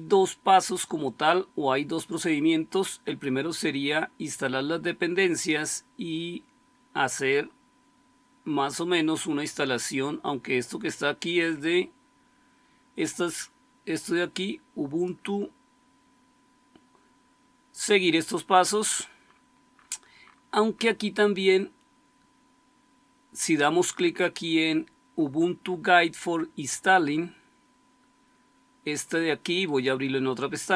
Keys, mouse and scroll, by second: 7.8-13.9 scroll down 2, 13.9-15.0 scroll down 1, 15.0-16.9 scroll down 1, 16.9-19.1 scroll down 1, 19.1-25.6 scroll down 1, 25.6-27.7 scroll down 1, 27.7-29.6 scroll down 1, 29.6-30.7 scroll down 1.